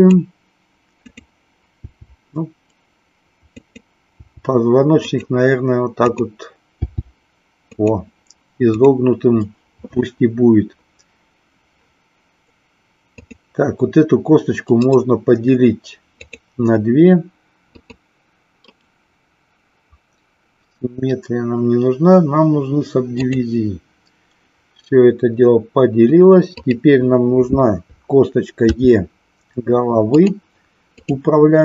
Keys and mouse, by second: 0.1 click, 1.2 click, 1.7 g, 4.2 g, 6.1 click, 7.7 click, 8.6 click, 14.8-16.3 right drag, 17.7 click, 18.7-23.3 right drag, 26.5 click, 28.7 e, 30.9 click.